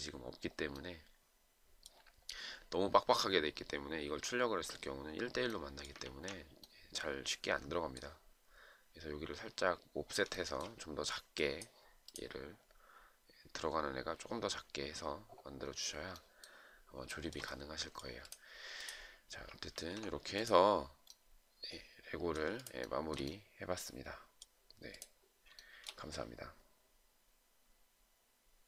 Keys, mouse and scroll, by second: 6.3 ctrl+z, 10.7 shift+right click, 17.4 shift+right click, 20.0 ctrl+z, 22.9 shift+click, 23.2 shift+right click, 25.9 shift+right click.